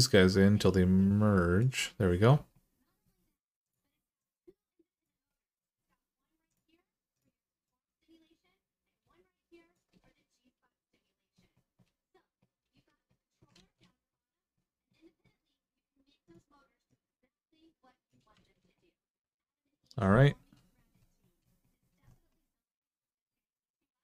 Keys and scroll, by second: 13.3 ctrl+z, 18.2 alt+z.